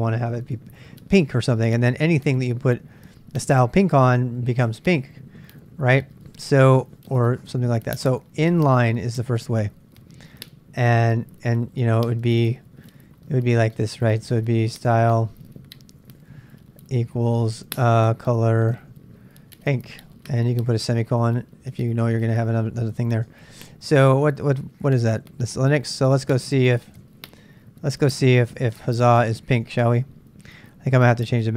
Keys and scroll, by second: 5.0-23.7 typing, 26.1 super+Tab, 27.1 super+Tab, 28.7-29.6 typing, 29.7 super+Tab.